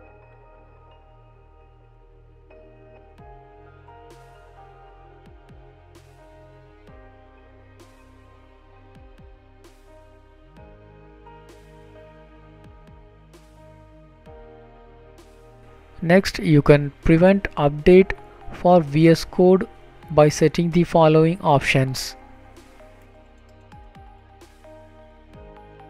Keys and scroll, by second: 3.2 ctrl+s, 15.0 Down, 17.7 Return, 19.3 Down, 19.3 Down, 20.8 Return, 21.3 Right.